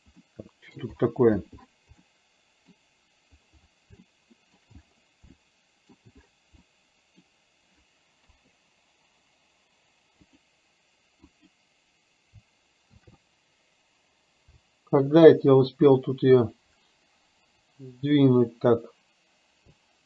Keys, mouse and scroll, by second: 0.3-0.9 middle drag, 2.1-2.8 middle drag, 4.0-4.6 shift+middle drag, 5.4-6.0 shift+middle drag, 6.8 middle click, 8.3 KP_0, 11.4 click, 13.0 shift+f.